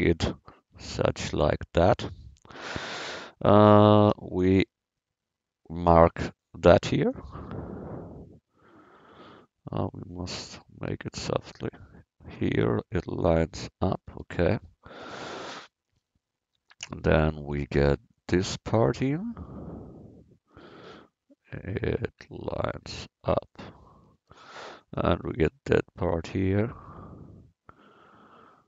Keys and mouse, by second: 0.8 Tab, 2.6 a, 4.1 c, 7.2 click, 14.2 a, 15.0 c, 17.7 c, 23.9 a, 24.2 c.